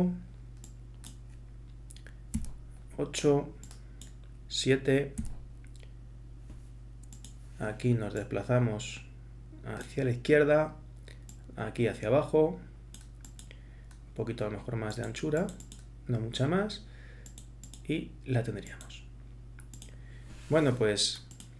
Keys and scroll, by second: 2.3 8, 5.2 7.